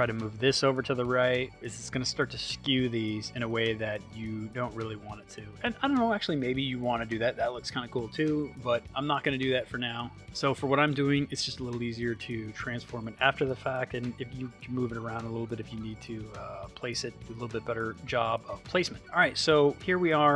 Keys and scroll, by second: 9.4 super+z.